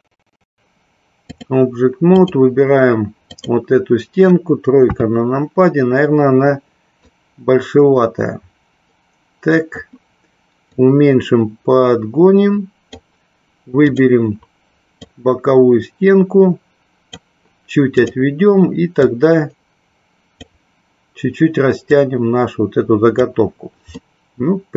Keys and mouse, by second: 0.6 click, 3.2 click, 4.7 KP_3, 7.1-9.9 drag, 10.6-12.9 drag, 15.0-17.1 drag, 18.0 click, 19.0-20.4 drag, 21.7-23.2 drag, 23.9-24.7 middle drag.